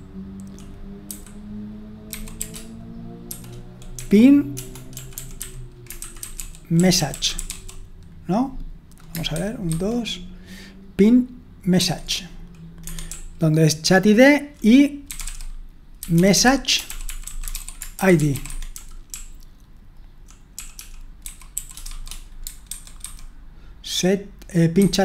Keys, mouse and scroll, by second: 0.0-8.0 typing, 9.4 super+1, 9.7 super+2, 11.8 super+1, 12.8 Escape, 13.1-21.9 typing, 22.7 super+1, 23.1 super+2, 24.8 super+1.